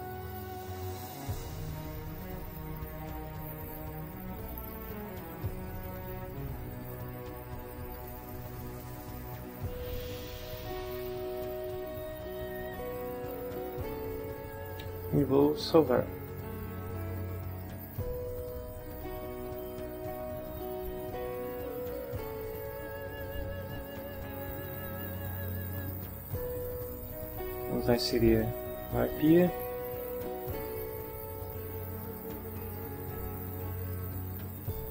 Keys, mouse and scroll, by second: 0.3 click, 3.2-5.6 middle drag, 8.0 click, 10.2-12.1 middle drag, 13.1 middle click, 15.8 ctrl+s, 22.7 click, 24.0 click, 27.4 click, 29.3 click, 30.7 click, 32.6 click, 34.5 ctrl+click.